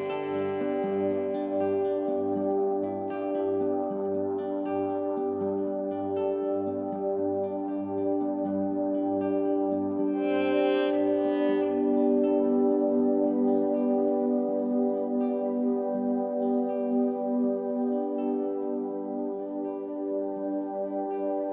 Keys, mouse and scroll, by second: 11.6 drag, 11.9-12.5 middle drag, 12.5-13.2 scroll up 2, 13.2-14.2 middle drag, 14.2-14.6 scroll up 3, 14.6-16.3 middle drag, 16.3 click, 17.4-20.8 middle drag, 20.8 click.